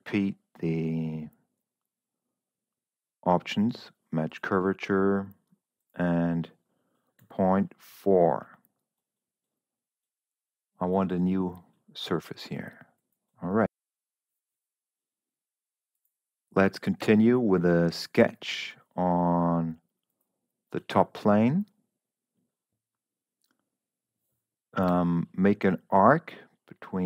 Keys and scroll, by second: 7.6 ., 7.8 4, 17.4 s, 25.3 a.